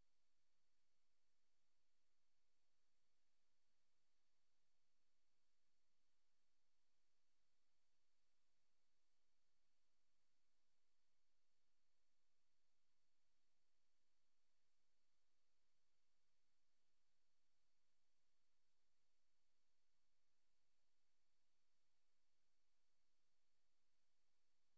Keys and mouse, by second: 0.5 click, 4.3 click, 8.7 click, 11.2 click, 12.6 click, 13.4 click, 14.4 click, 16.2 ctrl+z, 16.4 ctrl+z, 16.8 ctrl+z, 19.2 click, 23.1 click, 23.9 click, 24.5 click.